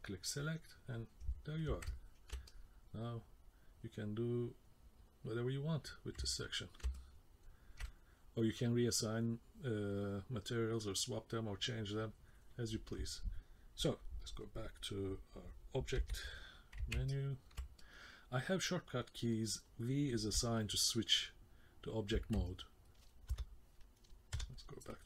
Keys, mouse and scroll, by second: 1.9 ctrl+middle click, 2.5 middle click, 6.4 ctrl+middle click, 6.9 middle click, 15.9 v, 17.1 ctrl+middle click, 17.8 middle click, 19.3 middle click, 22.5 ctrl+middle click, 23.3 KP_0, 24.3 KP_0.